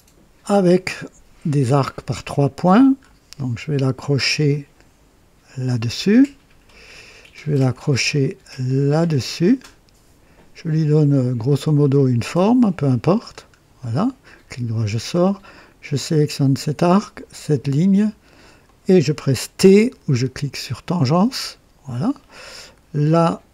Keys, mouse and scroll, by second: 0.4 click, 1.7 click, 2.9 scroll up 2, 5.4 click, 6.1 right click, 9.0 click, 11.9 click, 12.5 right click, 13.2 scroll down 2, 13.7 right click, 16.5 click, 18.5 click, 21.0 t.